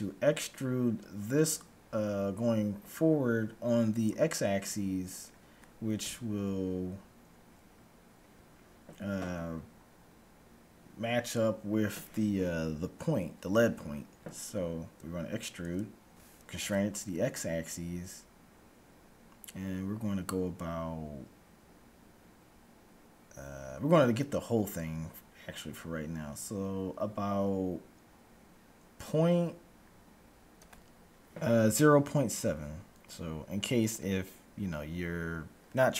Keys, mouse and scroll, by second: 5.3-7.1 middle drag, 6.1 KP_1, 15.5 e.